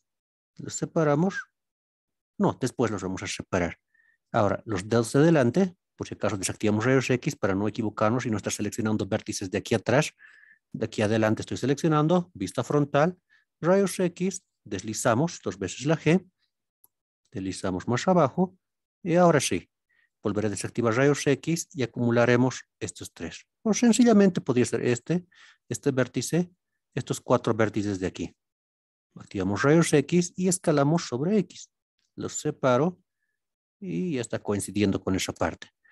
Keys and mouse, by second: 2.3 right click, 5.3 alt+z, 7.1-8.2 right drag, 8.5-9.4 middle drag, 10.3-10.9 middle drag, 12.4 KP_1, 13.0 alt+z, 15.3 g, 18.2 click, 20.3 alt+z, 21.6 shift+click, 23.9-24.4 drag, 25.0 shift+click, 26.5 shift+click, 27.6 shift+click, 29.2 alt+z, 30.7 s, 30.9 x, 34.4 drag, 35.3 alt+z.